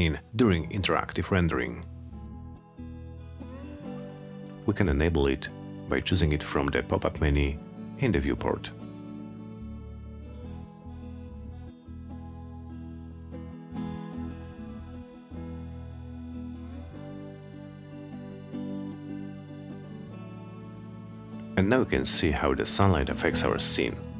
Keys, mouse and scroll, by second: 0.6 click, 3.9 click, 5.4 click, 17.4 click.